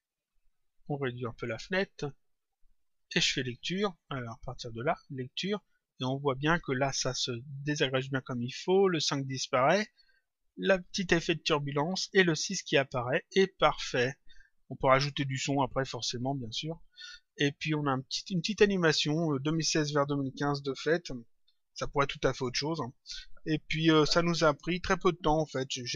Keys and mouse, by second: 0.7 click, 4.2 click, 17.0 click, 22.4 click.